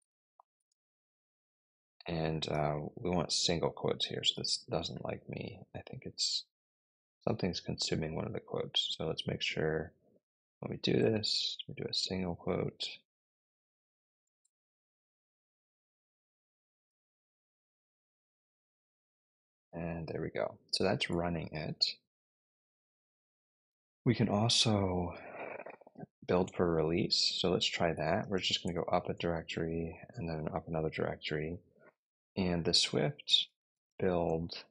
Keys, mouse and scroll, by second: 0.0-0.5 typing, 0.6 Return, 4.0 shift+', 4.3 Return, 8.1 Up, 8.6 Left, 8.7 Left, 8.9 Left, 9.4-9.9 Left, 10.9-11.5 typing, 12.0 Right, 12.5-12.8 Right, 12.9-13.3 Tab, 14.3 BackSpace, 14.7 BackSpace, 15.8 typing, 17.2 Return, 25.3-28.5 typing, 32.3-34.4 typing.